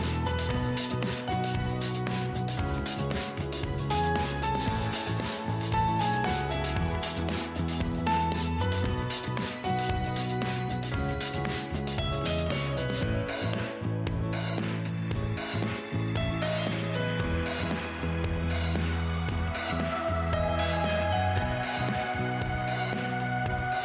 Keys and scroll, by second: 14.1 ctrl+z.